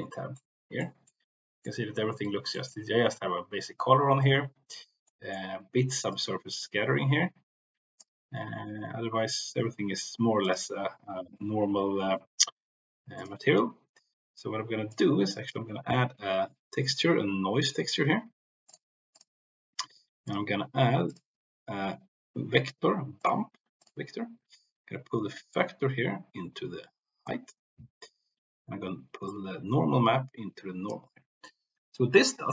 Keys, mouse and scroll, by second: 0.2 middle click, 1.2 middle click, 2.5 middle click, 5.2 middle click, 6.2-8.0 drag, 10.4 drag, 13.1 click, 14.9-19.1 drag, 20.1-20.6 drag, 21.1-23.8 drag, 25.5-27.2 drag, 29.3-31.0 drag, 32.1-32.5 middle drag.